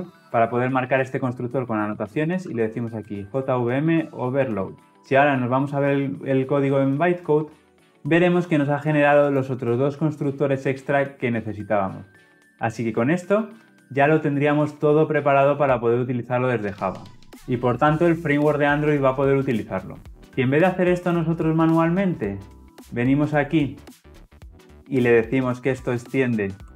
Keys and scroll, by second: 4.6 Return.